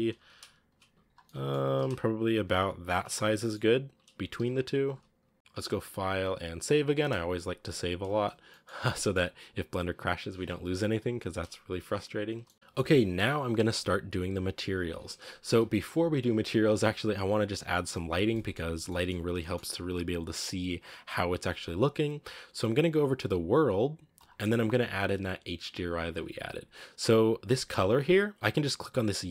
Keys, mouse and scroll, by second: 0.0 g, 0.7 s, 1.1 middle click, 1.5 g, 3.0 a, 3.3-3.8 middle drag, 3.8 right click, 4.1 g, 5.1 s, 5.3-8.2 middle drag, 8.2 scroll down 3, 8.3 middle drag, 8.5-8.8 scroll up 3, 8.8-10.5 middle drag, 10.5-11.3 right drag, 11.3 KP_Decimal, 11.8-12.3 scroll down 7, 12.3-14.7 shift+middle drag, 14.7 scroll up 2, 17.9 scroll down 1, 18.2-29.3 middle drag.